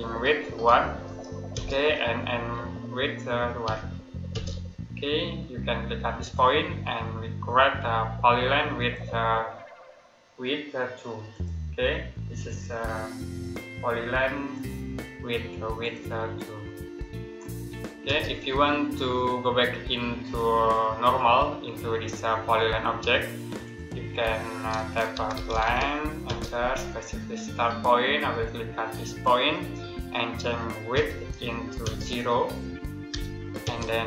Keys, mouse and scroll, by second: 0.5 1, 1.4 space, 3.5 1, 4.2 space, 6.1 click, 8.6 click, 17.9 space, 22.4 middle click, 23.2 click, 24.7-26.5 typing, 28.9 click, 30.8 w, 31.7 space, 32.9 0, 33.5 space.